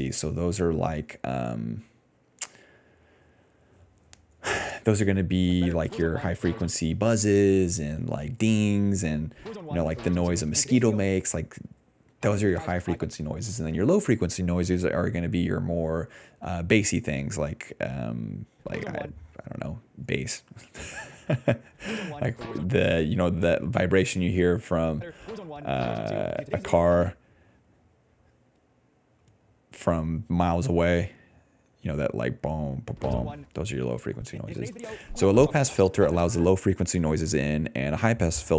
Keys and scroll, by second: 5.4 space, 5.7 d, 6.7 space, 7.1 ctrl+c, 7.4 alt+v, 9.2 space, 11.0 space, 12.1 space, 12.9 space, 18.4 space, 19.0 space, 21.6 space, 22.6 space, 24.9 space, 26.3 s, 27.0 space, 28.2 ctrl+s, 29.2 d, 32.8 space, 33.4 space, 34.2 ctrl+s, 34.4 space, 34.7 d, 36.3 space, 36.5 d.